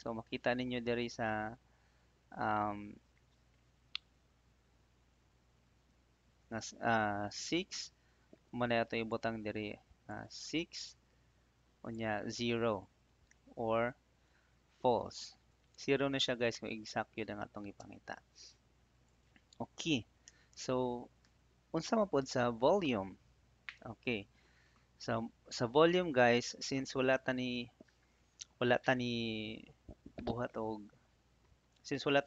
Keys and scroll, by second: 17.7 Return.